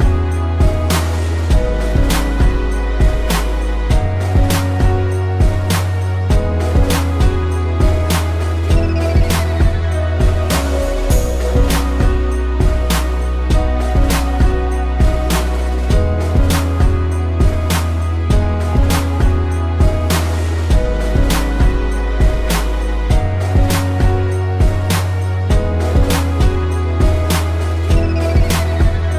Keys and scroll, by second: 1.6 space, 4.0 space, 5.4 space, 6.7 space, 8.2 a, 10.1 a, 12.5 space, 15.3 z, 15.7 a, 18.8 space, 21.4 ctrl+-, 22.8 p, 23.1 ctrl+=, 23.2 space, 25.3 ctrl+z, 27.3 ctrl+z.